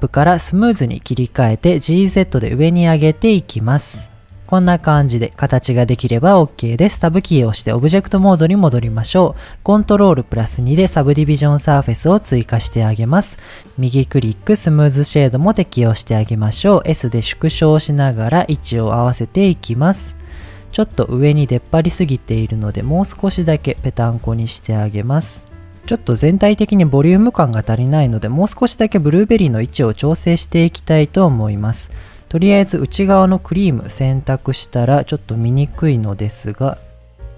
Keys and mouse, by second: 1.0 middle click, 2.0 g, 2.2 z, 4.4 middle click, 5.6 middle click, 7.1 Tab, 10.4 ctrl+2, 13.9 right click, 16.6 s, 17.2 click, 17.5 g, 17.5 z, 18.4 click, 19.2-19.5 middle drag, 20.1 middle click, 20.7 Tab, 22.0 middle click, 22.4 g, 22.6 z, 26.5-26.9 middle drag, 27.2 middle click, 29.8-30.1 middle drag, 30.8 click, 31.4 click, 31.9 click, 33.1 Tab, 33.7 shift+middle click, 35.5 Tab, 36.9 click.